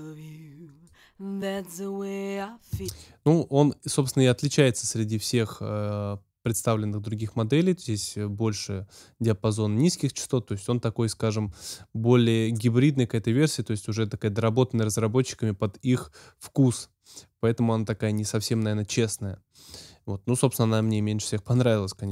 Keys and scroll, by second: 2.7 space.